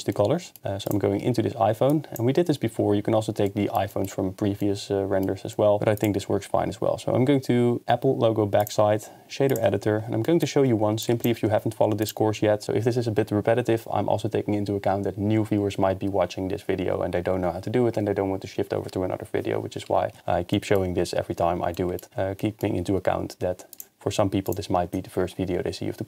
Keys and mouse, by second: 0.1 middle click, 0.9 click, 1.9 click, 3.5-3.8 middle drag, 5.5 middle click, 5.8 KP_0, 8.7-9.6 drag, 11.0 drag, 11.3 g, 20.5 middle click, 23.8-24.1 drag, 24.1 g.